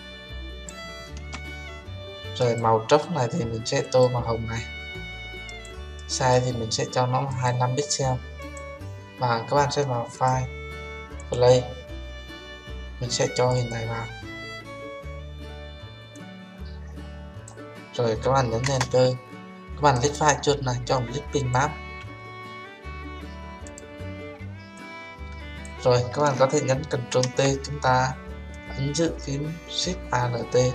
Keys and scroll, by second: 18.6 Return, 26.9 ctrl+t.